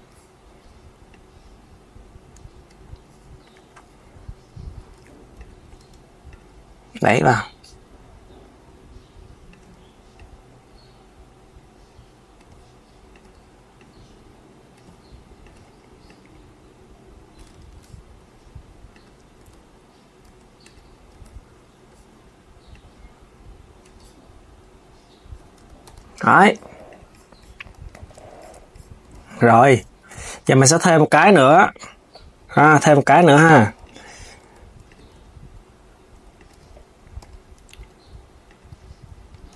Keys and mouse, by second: 0.8 click, 4.7 Tab, 5.1 click, 5.5 Tab, 6.0 click, 9.2 click, 9.8 click, 12.8 click, 13.4 click, 15.1 click, 15.7 click, 17.2 Tab, 18.6 click, 19.1 Tab, 20.0 Tab, 20.3 click, 20.8 Tab, 22.4 click, 25.3 Tab, 25.6 KP_3, 26.6 click, 27.7 s, 28.9 s, 30.8 click, 32.4 Tab, 33.3 Tab, 33.5 click, 34.1 Tab, 34.5 click, 36.9 KP_1, 37.5 g, 38.4 KP_3.